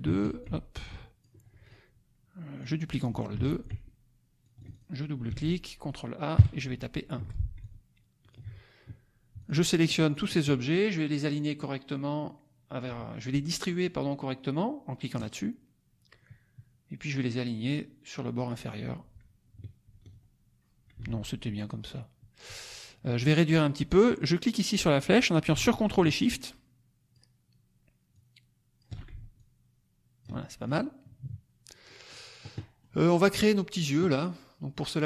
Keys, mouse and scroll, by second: 0.0 ctrl+d, 0.4 ctrl+click, 1.5 ctrl+click, 2.5 click, 3.3 ctrl+d, 3.6-4.9 ctrl+drag, 5.3 ctrl+a, 6.3 KP_1, 7.1 F1, 7.5 ctrl+click, 9.3-10.3 shift+drag, 15.1 click, 18.3 click, 21.0 ctrl+z, 24.1-27.2 drag, 28.1 ctrl+shift+click, 29.4 ctrl+click, 30.6 ctrl+drag, 31.0 ctrl+KP_Subtract, 31.8 middle click, 32.0 click, 32.5 middle click.